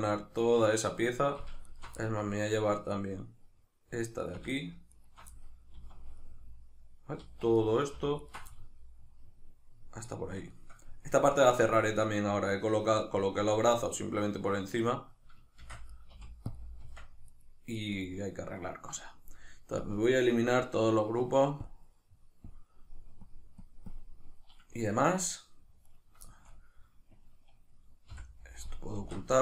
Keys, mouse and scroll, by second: 1.6 alt+shift+right click, 2.0-4.9 middle drag, 4.9 alt+shift+right click, 5.8 z, 6.2 middle click, 7.2 z, 7.6-8.2 middle drag, 8.2 alt+shift+right click, 8.3-16.0 middle drag, 15.7 shift+d, 16.0 right click, 16.1 p, 16.9 Tab, 17.3 right click, 17.8 right click, 17.9 right click, 19.8-25.9 drag, 25.9 right click, 26.3-28.1 shift+middle drag, 28.1 h, 29.0 alt+q.